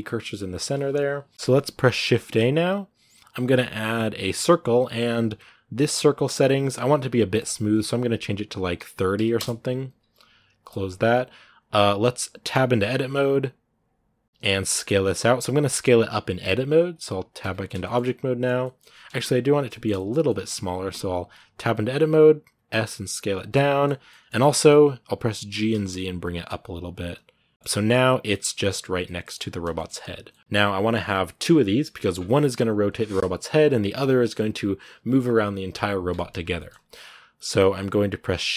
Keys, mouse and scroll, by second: 1.3 x, 4.2 shift+a, 9.2-11.1 drag, 11.1 scroll up 2, 12.3 Tab, 17.6-19.7 shift+middle drag, 19.7 scroll up 1, 19.7 shift+middle click, 20.7 Tab, 23.4-25.3 middle drag, 25.3 g, 27.5 scroll up 3, 28.1-37.2 middle drag, 37.2-38.4 scroll up 1, 38.4 shift+d.